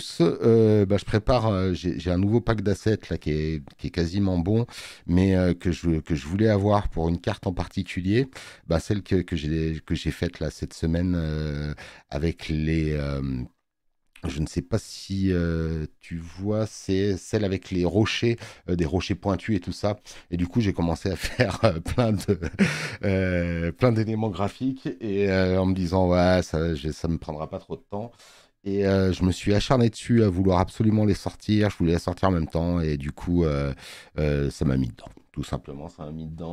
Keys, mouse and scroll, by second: 30.2 click, 31.5 click, 33.5 click.